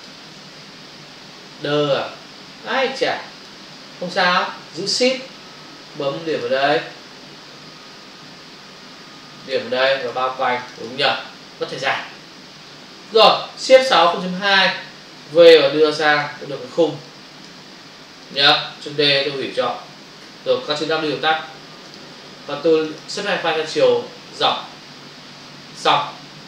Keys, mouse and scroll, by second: 2.7 space, 6.2 shift+click, 9.3 shift+click, 9.7 click, 10.1 double click, 10.6 click, 10.8 click, 10.9 double click, 11.8 f, 13.0 ctrl+-, 13.8 shift+F6, 14.4 Return, 15.2 v, 15.8 click, 17.0 click, 18.2 click, 21.9 click, 24.5 click.